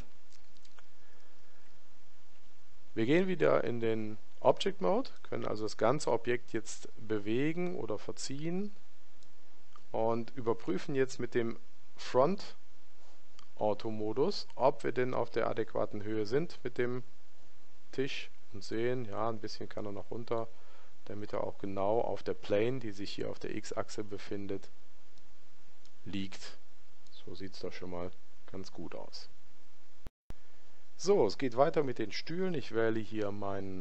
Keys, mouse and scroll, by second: 5.3-7.2 middle drag, 15.2-17.5 middle drag, 18.8 click, 25.2-28.5 middle drag.